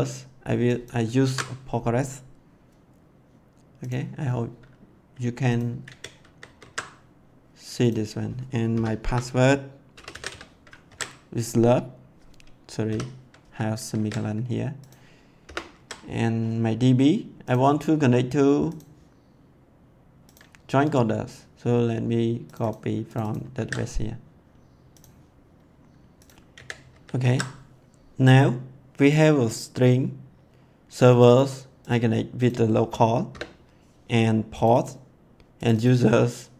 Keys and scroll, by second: 1.2 ctrl+c, 5.9 ctrl+v, 6.2 ctrl+s, 8.7-10.7 typing, 10.8 ctrl+s, 12.8 ;, 13.7 ctrl+s, 15.4 BackSpace, 15.7 ctrl+s, 23.5 ctrl+c, 26.5 ctrl+v, 26.9 ctrl+s, 33.3 BackSpace.